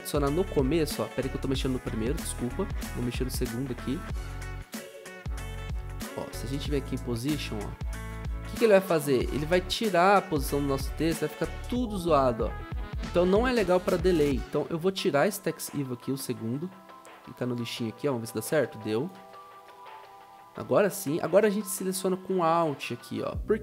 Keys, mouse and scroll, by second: 0.8 ctrl+z, 0.8 u.